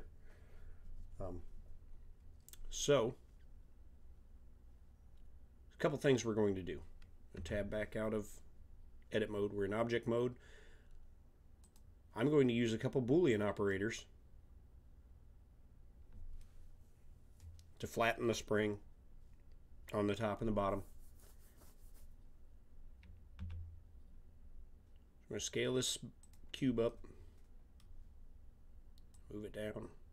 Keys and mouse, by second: 7.4 Tab, 11.6-12.6 drag, 13.7-15.6 middle drag, 23.3 s, 29.1-30.1 drag.